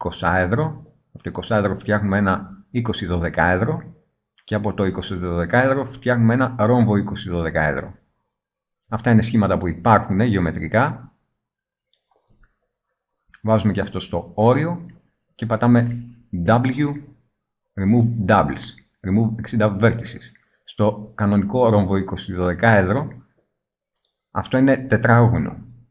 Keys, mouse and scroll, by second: 12.3 middle click, 15.4-16.6 middle drag, 16.6 w, 20.4-21.6 middle drag.